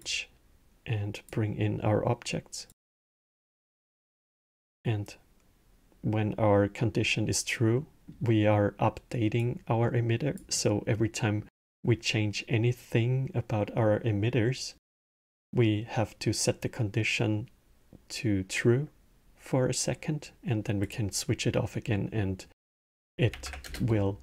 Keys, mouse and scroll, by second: 2.4 click, 7.5-9.1 middle drag, 9.1 click, 10.9-14.1 middle drag, 14.6-17.7 middle drag, 20.6 click, 21.7-23.1 middle drag, 23.1 shift+Left, 23.4 space.